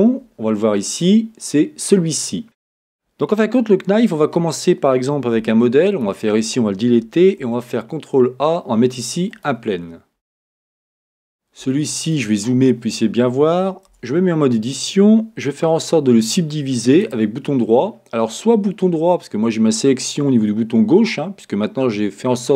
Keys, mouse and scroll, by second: 2.4 click, 4.2 Tab, 5.4 x, 7.4 shift+a, 10.3-11.7 middle drag, 10.9-11.7 scroll, 12.3-13.9 scroll, 13.9 Tab, 17.0-22.5 right drag.